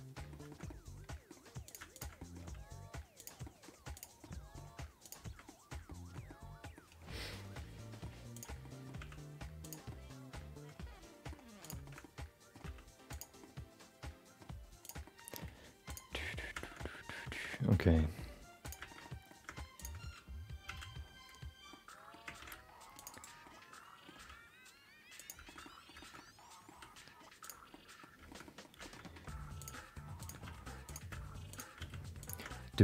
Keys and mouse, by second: 0.7 middle click, 1.6 click, 1.9 shift+click, 2.1 middle click, 2.6 g, 3.6 middle click, 3.9 click, 4.2 middle click, 4.6 g, 5.6 middle click, 5.9 shift+middle click, 6.4 middle click, 7.9 middle click, 8.3 click, 8.6 middle click, 9.0 g, 10.0-11.3 middle drag, 11.6 click, 11.8 shift+middle click, 12.0 middle click, 12.6 g, 13.4-14.4 middle drag, 14.8 click, 15.0 middle click, 15.4 g, 16.3 middle click, 16.8 middle click, 17.4 middle click, 17.9 middle click, 18.6 click, 18.9 shift+middle click, 19.7 shift+click, 20.6 f, 21.7 middle click, 22.4 ctrl+r, 23.5 middle click, 25.2 g, 25.5 middle click, 25.7 middle click, 26.2 middle click, 26.7 r, 27.8 middle click, 28.3 shift+middle click, 28.5 middle click, 28.9 middle click, 29.6 click, 30.2 shift+click, 30.4 f, 30.8 click, 31.5 shift+click, 31.8 f, 32.2 click.